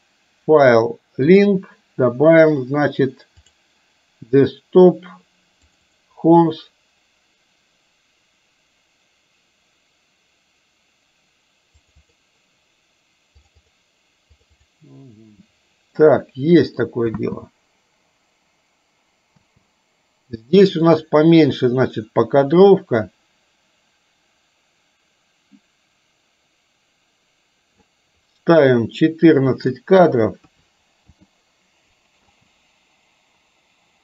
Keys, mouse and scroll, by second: 16.2-16.8 middle drag, 17.2 space, 19.3 space, 20.9-27.9 drag, 29.8-31.2 drag, 32.3 space.